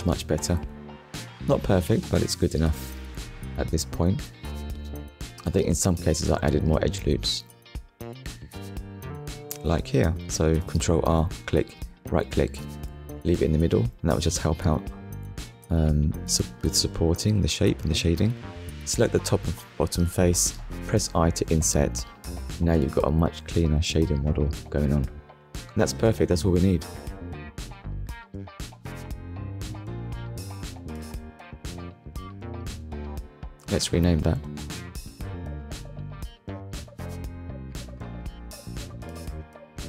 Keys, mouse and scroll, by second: 2.8 middle click, 3.4 scroll up 1, 3.8 middle click, 5.3 click, 5.8 Tab, 7.4 click, 8.1 middle click, 9.6 ctrl+r, 11.4 click, 12.0 right click, 12.6 middle click, 13.9 click, 14.4 click, 15.0 middle click, 15.9 shift+click, 21.0 click, 21.4 Tab, 21.8 click, 22.2 middle click, 23.5-23.9 scroll down 2, 23.9 shift+middle click, 26.5 middle click, 27.2-27.6 scroll down 2, 27.6 shift+middle click, 28.6 KP_1, 29.4 scroll down 1, 30.0 shift+middle click, 31.7 ctrl+s, 32.4 scroll up 1, 33.1 click, 34.7 click, 36.0 shift+h, 39.0 shift+c, 39.3 l, 39.6 m.